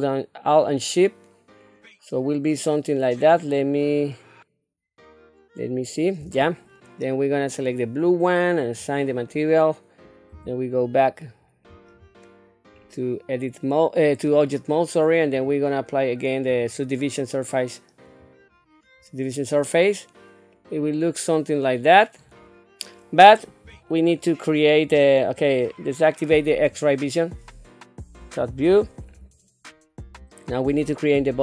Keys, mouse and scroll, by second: 7.5 click, 8.6 click, 10.3 Tab, 12.0 scroll down 1, 12.7 scroll up 2, 15.3 click, 16.5-18.2 drag, 20.5-22.9 middle drag, 23.6 Tab, 24.1 scroll up 2, 24.9 scroll down 1, 26.8 click, 28.3 KP_7, 29.0-29.4 scroll up 3, 29.7 scroll down 2.